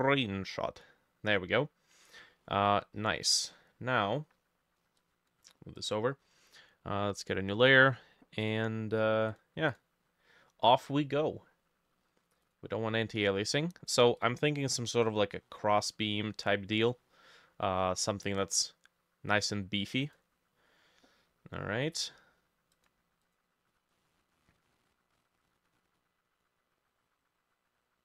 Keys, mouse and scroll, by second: 2.4 middle click, 5.4 middle click, 9.7 double click.